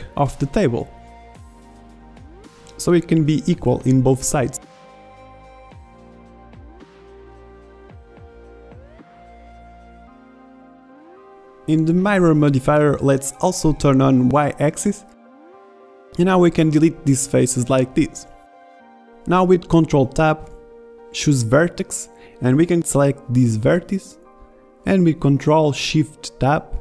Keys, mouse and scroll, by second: 2.0 g, 5.8 ctrl+r, 7.6 g, 10.2 ctrl+Tab, 12.0 a, 12.2 b, 14.5-15.2 middle drag, 16.2 b, 17.5 middle click, 17.7 middle click, 18.2 Delete, 20.7 ctrl+Tab, 24.5 click, 24.8 ctrl+z, 24.8 ctrl+shift+Tab.